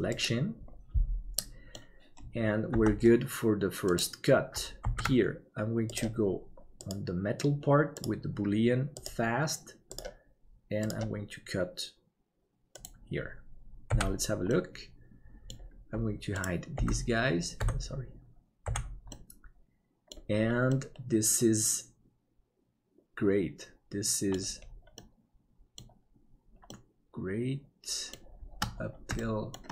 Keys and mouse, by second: 1.4 middle click, 2.8 Tab, 5.0 ctrl+s, 7.8-14.0 drag, 14.0 h, 14.5-15.6 middle drag, 16.8 g, 18.7 h, 19.1-20.1 middle drag, 20.7-24.3 middle drag, 24.9 middle click, 26.7-28.2 middle drag, 29.1 shift+middle click.